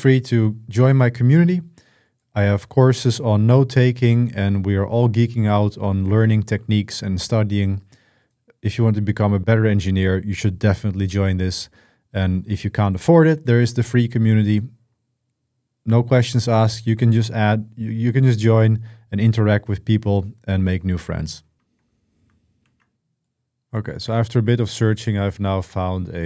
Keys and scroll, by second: 22.4 super+1, 22.4 super+2, 22.4 BackSpace, 22.4 ctrl+v.